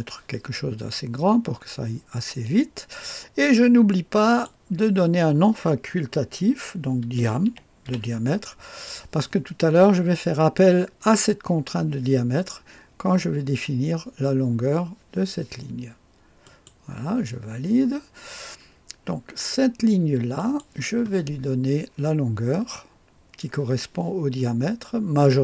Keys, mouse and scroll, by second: 4.2 click, 6.8-8.3 typing, 16.4 click, 20.3 click.